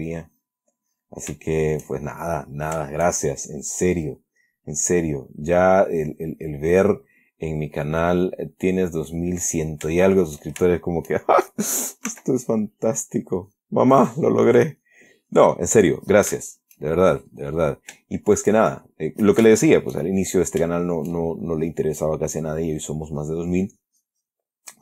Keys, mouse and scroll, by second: 0.1 click, 0.7 click, 1.2 click, 1.8 shift+middle click, 4.2 click, 6.2-7.4 drag, 8.2 click, 9.1 click, 10.3-10.8 shift+middle drag, 10.8 shift+scroll up 1, 11.0-11.4 shift+middle drag, 12.4 s, 13.2 click, 13.7 click, 14.3 click, 14.7 click, 15.1-16.5 drag, 16.8 shift+middle click, 17.4 shift+click, 18.3 shift+click, 19.9 shift+click, 21.0 shift+middle click, 21.9 shift+click, 22.7-24.8 drag.